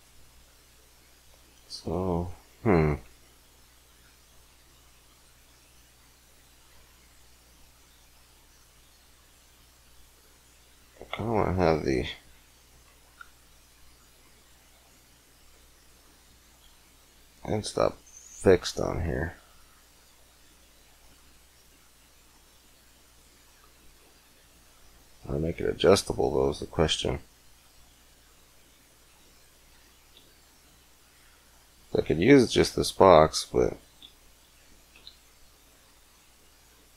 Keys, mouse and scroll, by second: 24.0 middle click.